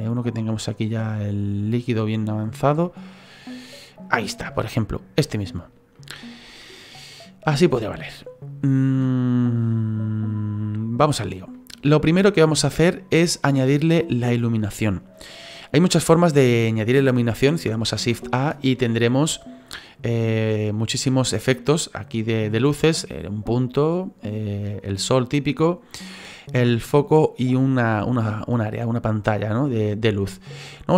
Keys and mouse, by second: 5.3 shift+middle click, 6.5 middle click, 11.5 middle click.